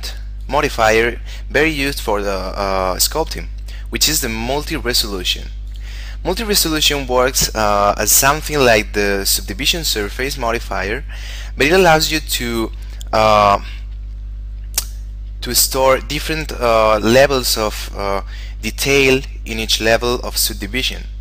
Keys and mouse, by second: 0.5 click, 5.9 click, 8.7 click.